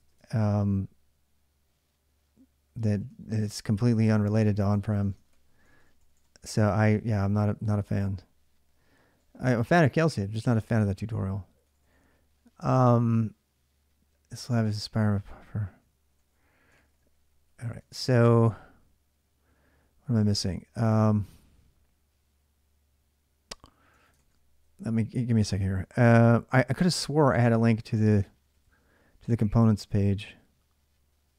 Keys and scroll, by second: 0.0-6.4 typing, 3.8 ctrl+[, 7.4-8.9 typing, 10.0-12.6 typing, 14.6 ctrl+[, 14.6-21.2 typing, 16.8 ctrl+j, 23.8 ctrl+[, 23.9 ctrl+l, 24.4-31.3 typing.